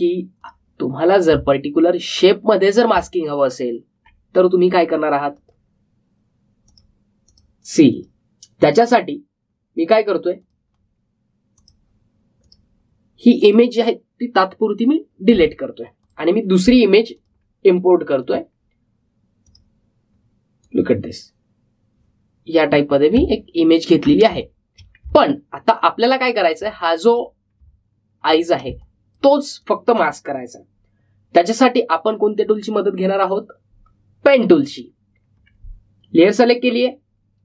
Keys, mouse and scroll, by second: 0.0 space, 1.3 click, 2.6-3.1 alt+scroll up 1, 4.4-5.0 alt+scroll down 1, 6.3 click, 16.9-24.3 drag, 24.3 alt+scroll up 1, 25.2 space, 25.3 click, 26.2 alt+scroll up 1, 27.5 space, 27.7 click, 28.1 space, 28.8-29.3 alt+scroll down 1, 29.6 space, 29.7 click, 30.1 space, 35.6 click.